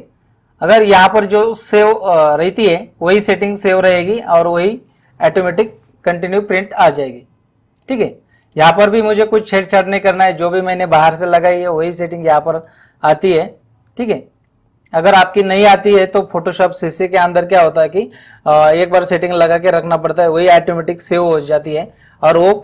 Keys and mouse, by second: 7.8 click, 10.0 click, 13.4 click.